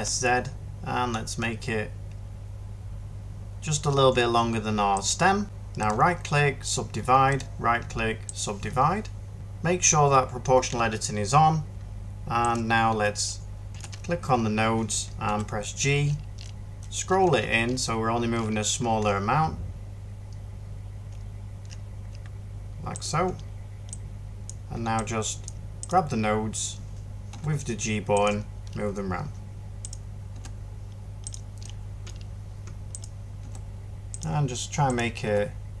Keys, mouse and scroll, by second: 3.1 typing, 15.1 g, 27.2 g, 30.2 g, 33.3 g.